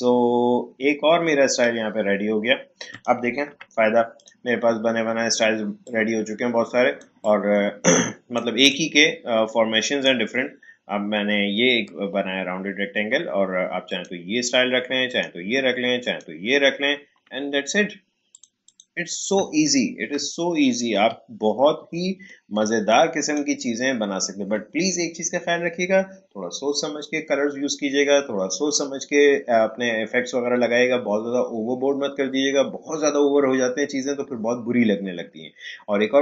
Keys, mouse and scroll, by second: 1.4 click, 3.4 Delete, 4.2-12.6 drag, 13.8 click, 20.2 space, 21.1 alt+scroll down 1, 22.0-22.5 alt+scroll up 1, 22.8-25.8 drag.